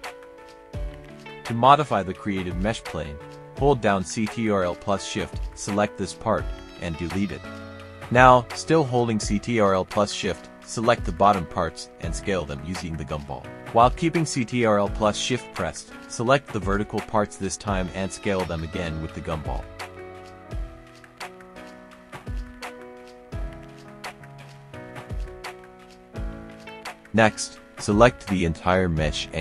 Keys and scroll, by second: 2.5 KP_0, 2.7 Return, 3.8 KP_3, 4.0 Return, 4.6 KP_2, 4.8 Return, 6.8 Delete, 28.1-29.4 typing.